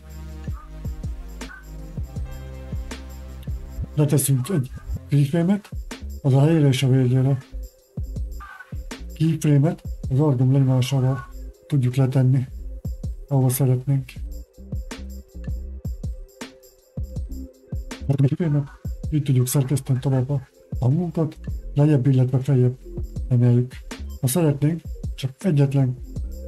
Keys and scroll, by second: 13.1 space.